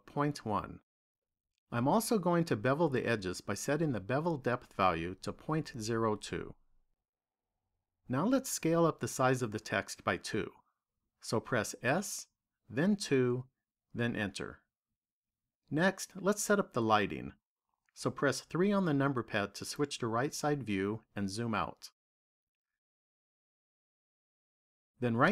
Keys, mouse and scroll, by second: 3.8 click, 11.7 s, 18.4 KP_3, 20.0-21.9 scroll down 7, 22.8 shift+middle click.